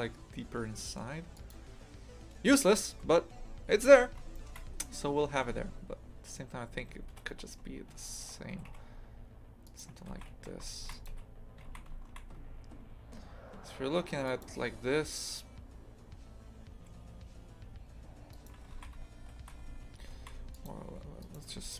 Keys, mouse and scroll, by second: 4.3-7.1 shift+middle drag, 7.1 ctrl+z, 7.3 ctrl+z, 8.0 shift+right click, 8.6 g, 10.1 shift+f, 11.1 a, 11.7 shift+f, 18.3 right click, 18.7 shift+f, 21.2 right click.